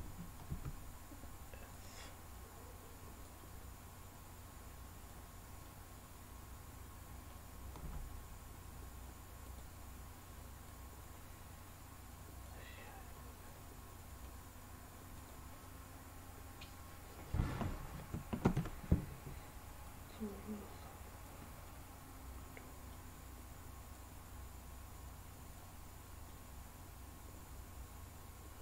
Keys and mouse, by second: 0.4 s, 1.7 click, 3.2-5.1 drag, 5.6-7.3 middle drag, 7.8 s, 9.5 click, 10.7-12.4 drag, 12.8-14.3 middle drag, 15.1 drag, 15.6-17.5 middle drag, 18.4 ctrl+z, 19.8-21.2 drag, 21.6-22.9 middle drag, 23.9-25.5 drag, 26.3-28.6 middle drag.